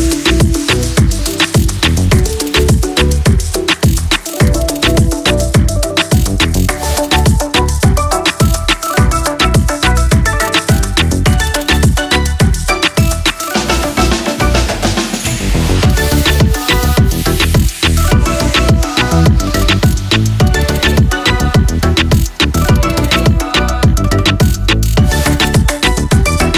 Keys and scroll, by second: 0.1 ctrl+=.